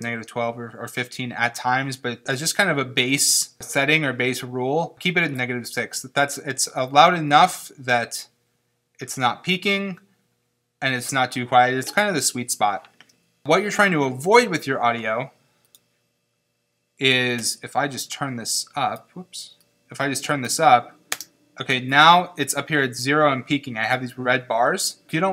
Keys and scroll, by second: 21.1 space.